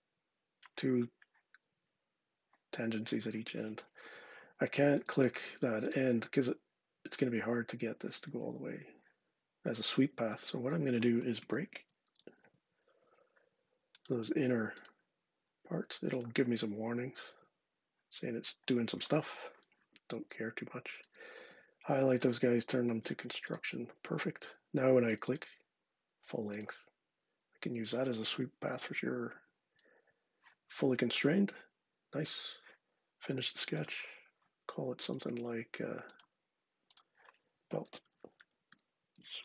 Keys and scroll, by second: 3.9 Escape, 10.9-12.7 typing, 19.6 Escape, 22.8 x, 37.6-39.4 typing.